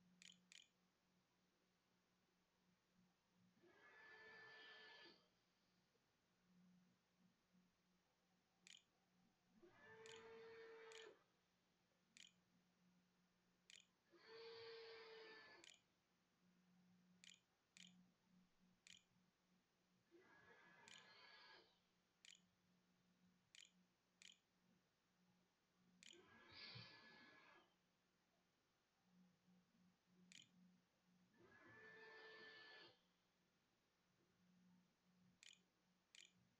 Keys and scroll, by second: 0.0-1.7 typing, 7.2-26.7 typing, 28.7-30.3 typing, 34.0-36.5 typing.